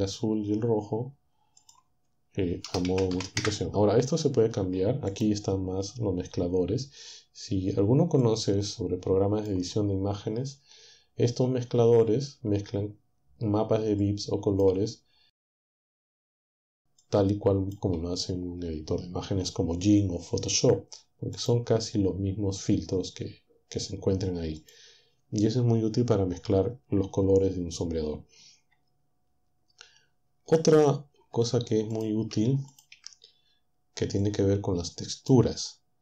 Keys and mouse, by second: 1.6 click, 2.7-3.2 typing, 3.5 Return, 5.1 click, 8.3-9.7 drag, 14.1 click, 15.5 click, 17.1-21.1 drag, 21.4 click, 24.6-31.2 drag, 31.2 Delete, 32.3 Delete, 32.9 Delete, 34.3-35.5 drag.